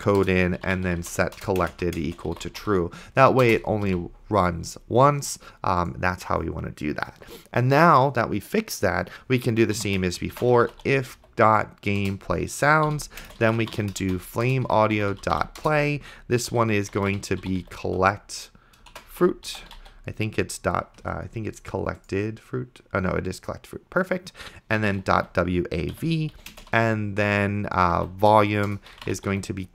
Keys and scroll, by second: 0.6-3.9 typing, 1.4 Return, 7.2 Return, 9.6-11.7 typing, 12.1 Return, 12.9 End, 13.3-20.4 typing, 24.7-26.7 typing, 26.0 Right, 28.0-29.7 typing.